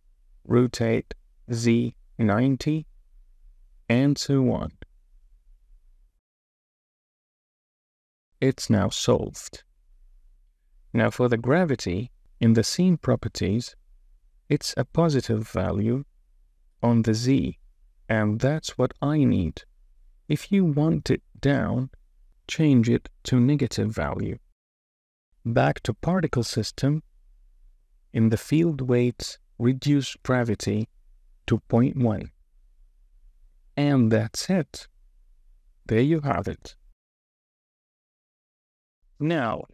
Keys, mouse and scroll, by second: 1.4 r, 2.5 z, 3.0 KP_9, 3.1 KP_0, 3.7 Return, 4.8 shift+click, 5.0 Tab, 5.2 Tab, 5.6-7.8 typing, 6.0 Return, 6.1 Tab, 6.2 click, 6.3 Tab, 6.9 Return, 7.0 Tab, 7.3 Tab, 7.9 Return, 10.7 space, 15.6 space, 20.2 space, 21.5-23.4 drag, 23.7 space, 25.4 space, 31.1-32.5 drag, 33.4 space.